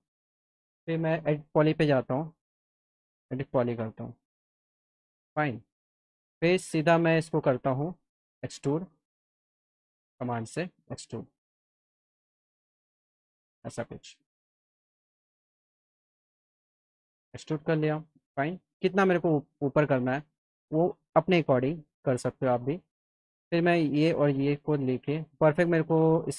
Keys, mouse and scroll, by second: 0.0 click, 1.4 e, 2.1 click, 4.2 click, 4.9 alt+middle click, 5.9 click, 6.3 alt+middle click, 7.4 right click, 7.8-8.2 scroll down 2, 8.5 right click, 9.5 click, 10.2-12.9 drag, 13.1 scroll up 1, 13.7 alt+middle click, 15.4 click, 15.7 alt+middle click, 17.0-19.9 drag, 20.7 middle click, 22.0 click, 23.2 click, 23.8 ctrl+click, 25.0 click, 25.6 alt+middle click.